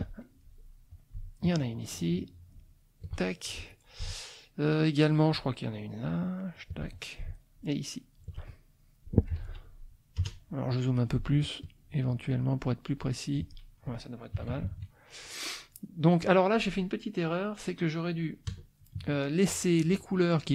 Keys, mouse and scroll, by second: 0.4 middle click, 1.7-3.2 shift+drag, 3.3 shift+middle click, 5.3-6.7 shift+drag, 7.5 shift+click, 9.4 ctrl+z, 10.2 KP_Add, 10.7 click, 11.6-13.5 shift+drag, 14.4 KP_Subtract, 15.6 click, 18.5 KP_Add, 19.0 KP_Subtract, 19.7 click.